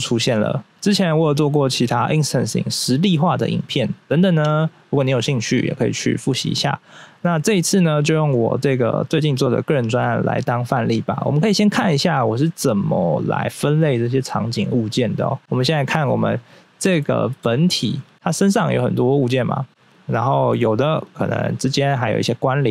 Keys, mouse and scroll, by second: 11.1 scroll down 1, 14.1 scroll up 1, 15.3 scroll up 2, 15.4 click, 16.5 click, 17.0 shift+middle click, 18.1 middle click, 19.7 right click, 19.9 right click, 20.3 right click, 20.7 right click, 20.8 right click, 21.0 right click, 21.6 double right click, 22.2 middle click.